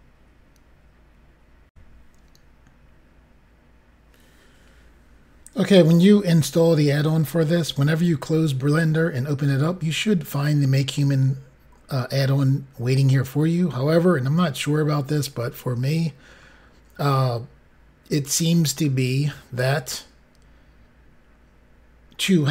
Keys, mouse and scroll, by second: 1.7 Pause, 2.8 Insert, 15.3-17.1 scroll up 5, 18.7 scroll up 5, 20.9 scroll down 3, 21.5-22.1 scroll down 1, 22.1-22.5 scroll down 3.